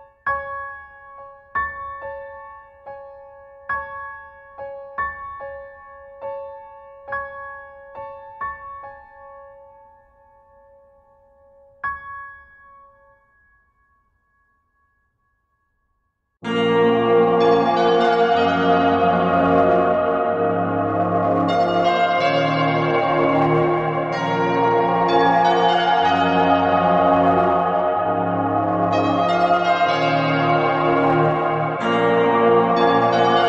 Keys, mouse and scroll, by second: 1.6 click, 3.0-4.4 drag, 6.8 click, 7.5 click, 11.1 middle click, 12.2-12.6 middle drag, 13.4-13.8 middle drag, 14.4-15.1 middle drag, 15.5-16.0 drag, 16.5 middle drag, 16.8 click, 16.8 right click, 21.2 click, 21.6 click, 22.8-24.1 drag, 25.1 click, 28.0 click, 33.0 click.